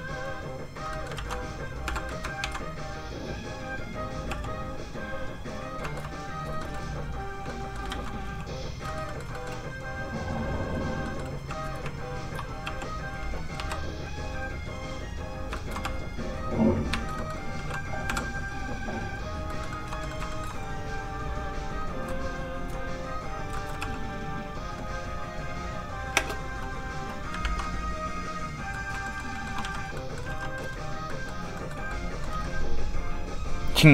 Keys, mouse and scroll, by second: 0.3 click, 0.4 click, 0.9 middle click, 1.2 ctrl+z, 1.9 z, 2.1 middle click, 2.5 ctrl+d, 2.7 click, 4.3 f, 4.4 click, 5.9 shift+middle click, 6.2 click, 6.6 shift+middle click, 7.5 click, 7.5 middle click, 7.9 ctrl+z, 8.4 click, 8.9 shift+middle click, 9.4 middle click, 9.8 click, 11.1 middle click, 11.4 f, 11.5 click, 11.7 shift+click, 12.7 click, 12.8 f, 12.9 click, 13.6 i, 13.9 click, 15.6 shift+middle click, 15.9 middle click, 16.0 click, 16.9 shift+middle click, 17.2 middle click, 17.3 middle click, 18.1 k, 18.3 click, 19.5 middle click, 19.6 shift+middle click, 20.8 shift+f, 22.1 shift+click, 23.6 shift+middle click, 23.8 middle click, 23.9 click, 26.2 space, 27.5 ctrl+Tab, 28.8 middle click, 28.9 shift+middle click, 29.2 shift+middle click, 29.9 z, 30.0 shift+middle click, 30.6 shift+z, 31.4 middle click, 31.4 scroll up 1, 31.6 shift+middle click, 31.9 middle click, 32.4 z.